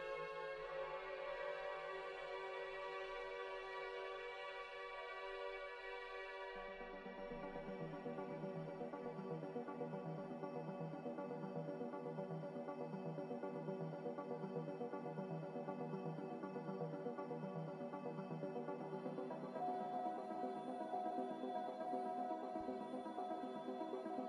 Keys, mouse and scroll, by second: 0.4 m, 7.0 click, 11.0 click, 18.1 click, 19.0 z, 20.6 3, 20.8 Return, 23.1 Return.